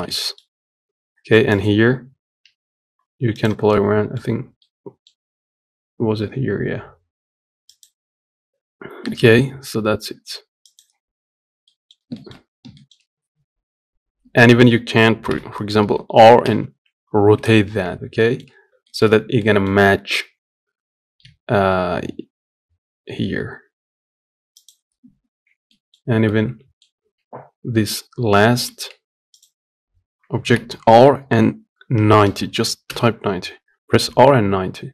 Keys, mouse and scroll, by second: 1.3 click, 3.5 middle click, 4.0 scroll down 3, 4.4 middle click, 5.4 g, 7.9-9.0 scroll up 1, 9.2 g, 11.2 scroll down 2, 11.4 middle click, 12.1 scroll up 1, 12.5-14.0 shift+middle drag, 14.0 Tab, 19.1-21.0 middle drag, 21.0 g, 24.8-25.4 scroll down 4, 25.4-26.8 middle drag, 26.8 Tab.